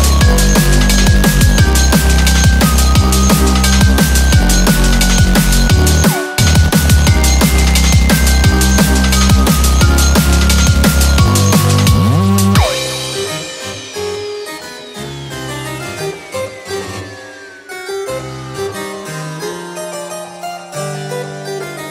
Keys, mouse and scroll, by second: 3.0-3.8 scroll up 5, 3.3 middle click, 3.8 middle click, 4.5 KP_7, 5.1 shift+middle click, 5.3 scroll down 2, 6.1 click, 6.3-7.1 scroll up 7, 6.6 shift+middle click, 7.3 shift+middle click, 8.5 click, 9.2 click, 9.6 click, 9.8 click, 10.9 click, 11.4 shift+a, 18.0 Tab, 18.0 scroll up 1, 19.4 1, 21.1 e.